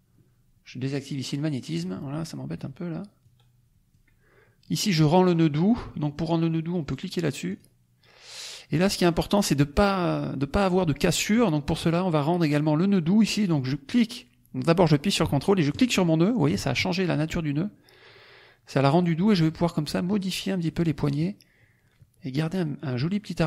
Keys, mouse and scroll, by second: 1.6 click, 3.1 click, 3.4-4.1 scroll down 2, 7.4 click, 8.6 middle click, 8.6-9.3 scroll up 1, 15.8 ctrl+click, 18.8 click, 21.1 click.